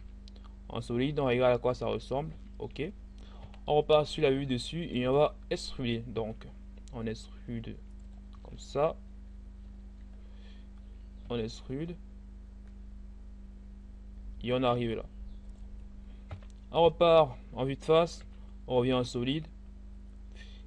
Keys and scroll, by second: 0.0 z, 3.4 7, 6.2 e, 10.8 e, 15.9 1, 18.2 z.